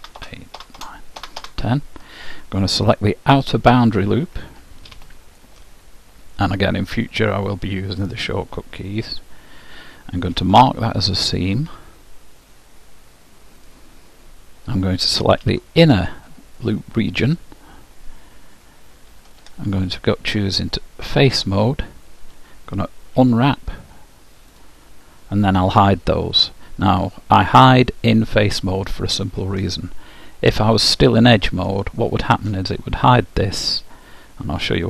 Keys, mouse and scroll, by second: 4.9 ctrl+e, 10.3 ctrl+e, 15.5 ctrl+e, 19.3 ctrl+Tab, 21.4 ctrl+Tab, 23.3 u, 27.6-29.4 middle drag, 30.4-32.2 drag, 31.2-33.9 middle drag.